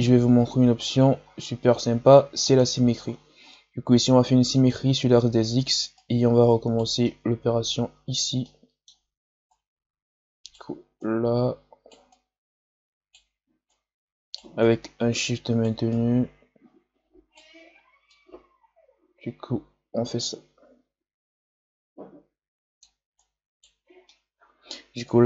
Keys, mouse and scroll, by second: 0.5 scroll down 6, 4.5 click, 5.9-7.0 right drag, 7.0 middle click, 7.9-8.3 scroll down 1, 8.4-9.4 middle drag, 9.4-18.1 right drag, 18.1-21.0 drag, 23.1 right click, 24.0-25.2 middle drag.